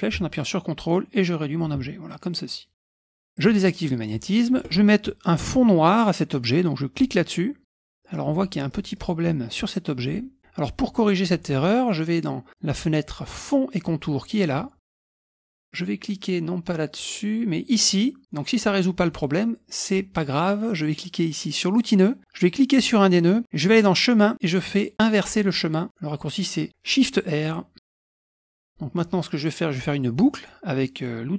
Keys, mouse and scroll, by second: 2.1 click, 3.3 click, 3.8 middle click, 3.8-4.3 scroll up 4, 6.9 click, 7.8 middle click, 7.8-8.1 scroll up 1, 8.1-8.8 scroll down 1, 8.8 middle click, 11.7-12.4 scroll up 1, 14.4 click, 15.4 click, 16.9 click, 17.8 click, 21.7 click, 22.7 click, 23.7 click, 27.4 click, 27.8 middle click, 28.2 middle click, 28.5 ctrl+scroll down 2, 28.7 ctrl+middle click.